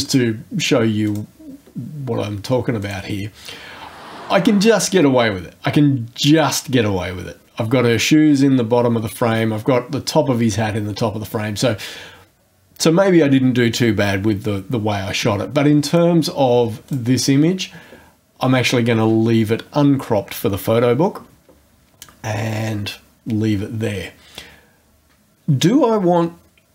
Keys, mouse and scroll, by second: 0.0 click, 1.1 click, 2.8 click, 4.0-6.6 drag, 15.9 click, 16.8 click.